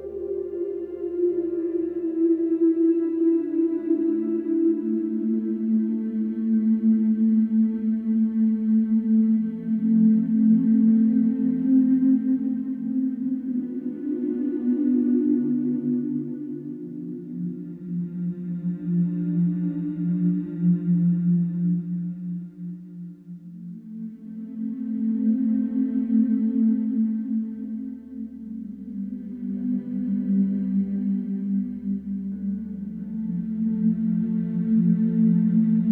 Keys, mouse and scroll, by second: 0.9 e, 5.8 e, 7.8 alt+click, 8.7 ctrl+b, 10.8 middle click, 11.2 scroll up 2, 11.5-12.6 shift+middle drag, 12.6 g, 17.0 click, 17.8 middle click, 18.5 g, 21.5 alt+click, 22.3 click, 23.1 alt+click, 23.8 g, 25.5 ctrl+b, 27.5 click, 28.4 click, 28.7 click, 35.0 alt+click.